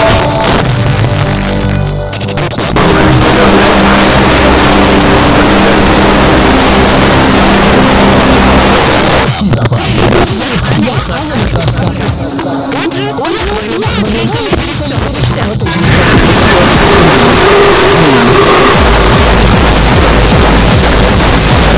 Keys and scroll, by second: 0.2 Page_Down, 8.7 Page_Down.